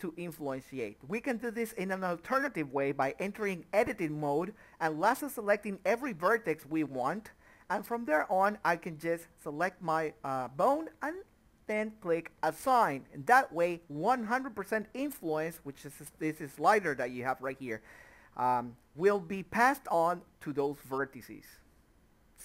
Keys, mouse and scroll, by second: 2.6 click, 3.0 a, 3.5 ctrl+right click, 9.2 click, 12.9 click, 14.9 click, 16.4 Tab, 18.3 click, 18.6 middle click, 20.5 middle click, 21.4 scroll down 1, 21.7 Tab, 22.0 middle click, 22.2 scroll down 1, 22.3 click.